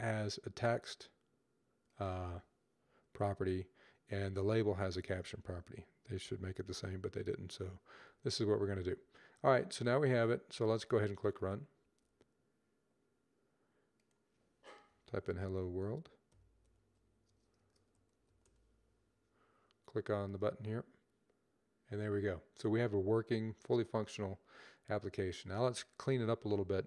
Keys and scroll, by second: 5.8 typing, 14.7-16.2 typing, 17.4-18.2 typing.